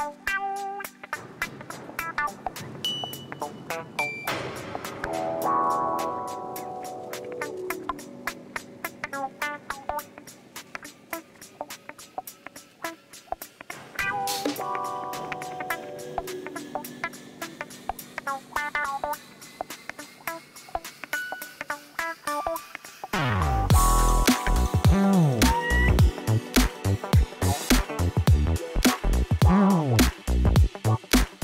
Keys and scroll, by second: 9.5 g, 9.7 r, 9.9 a, 10.4 y, 10.9 Return, 14.2 8, 14.4 5, 15.2 5, 15.8 5, 17.0 Return, 20.0 Tab.